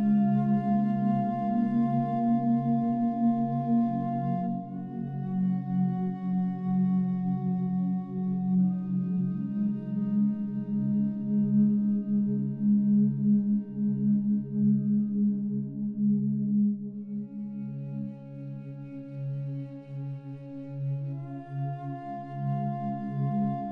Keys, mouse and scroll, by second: 0.2 click, 1.7-11.4 alt+drag, 19.9 shift+Num_Lock, 20.1 shift+d, 21.8 y.